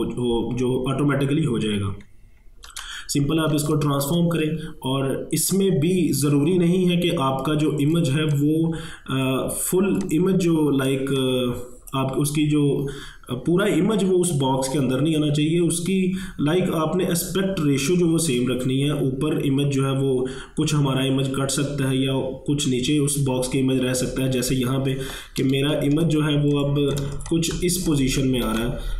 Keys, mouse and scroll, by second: 2.1 ctrl+Num_Lock, 2.1 click, 2.7 ctrl+t, 3.6 ctrl+space, 3.7 ctrl+click, 4.1 ctrl+space, 5.5-14.4 drag, 25.7 ctrl+Num_Lock, 26.0 ctrl+1, 26.4 space, 26.6 click, 26.9 space, 26.9 click, 27.0 space, 27.3 ctrl+click, 28.5 ctrl+t.